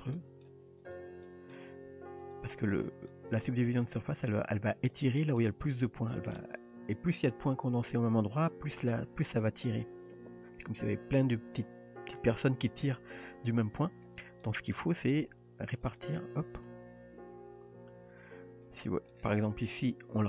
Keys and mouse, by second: 0.2 middle drag, 1.2-1.6 middle drag, 1.9 r, 2.8 drag, 3.1-3.4 middle drag, 3.7 r, 4.6 g, 5.2 middle drag, 6.0 click, 14.4 middle click, 15.3 g, 17.2 g, 19.1 middle click, 19.9 g.